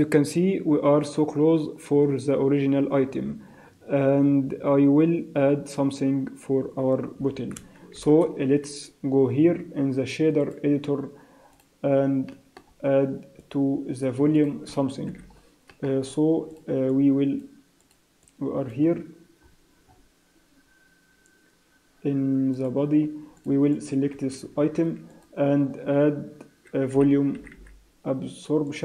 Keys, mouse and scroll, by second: 8.4 shift+F3, 10.3 click, 12.2 middle click, 12.7 scroll up 4, 13.3 click, 14.3 click, 15.0 n, 15.3-15.8 scroll down 3, 15.7 middle click, 16.5 click, 16.5-16.8 scroll up 1, 16.8 click, 17.8 click, 18.2 click, 19.3-20.4 scroll up 10, 22.5 click, 23.3 click, 23.7 click, 24.6 shift+a.